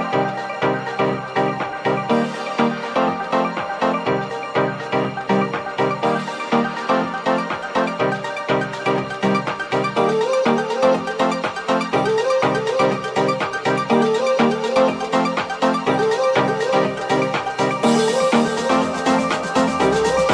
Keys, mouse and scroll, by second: 3.4 middle click, 6.0-9.5 middle drag, 9.7-20.3 middle drag, 14.1 g, 18.9 Tab.